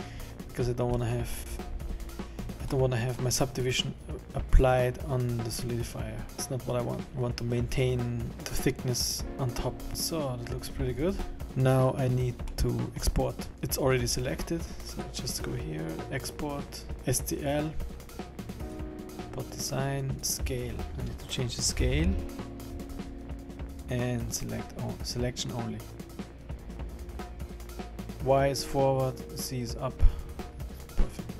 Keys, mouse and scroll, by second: 0.5-1.0 scroll down 5, 1.0 middle click, 1.5-2.3 scroll up 9, 2.8 middle click, 2.8 scroll down 1, 6.1 scroll down 2, 6.3 middle click, 6.3 scroll up 2, 6.4 middle click, 9.3 middle click, 9.3-9.6 scroll down 3, 9.9-10.3 scroll up 8, 10.8-11.6 scroll down 8, 11.4 middle click, 11.4 scroll up 3, 12.2 scroll down 1, 12.5 middle click, 13.1-13.5 scroll up 2, 14.9 click.